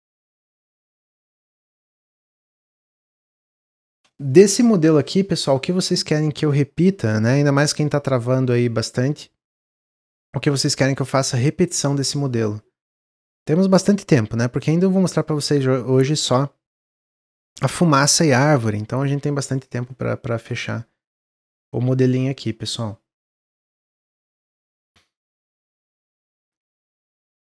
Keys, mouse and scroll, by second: 3.1 click, 3.5-6.6 middle drag.